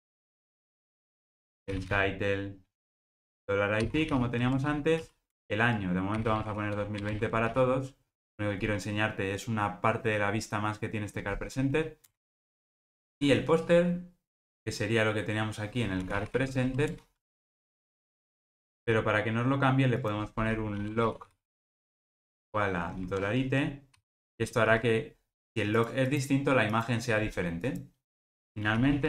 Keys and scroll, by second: 17.8 alt+super+[, 18.6 super+v.